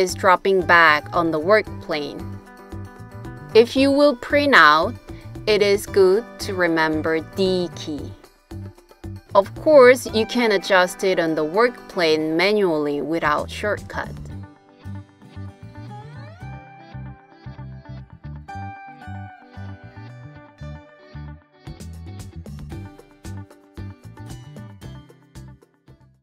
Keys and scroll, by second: 0.0 d, 2.6 d, 4.9 d, 7.4 typing, 9.2 super+z, 15.2 d.